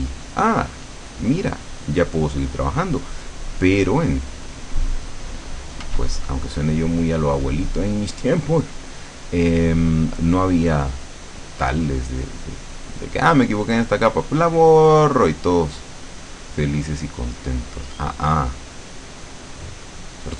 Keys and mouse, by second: 0.4-6.0 drag, 5.9 f, 6.3-8.1 drag, 10.3-13.9 drag, 14.8-20.3 drag.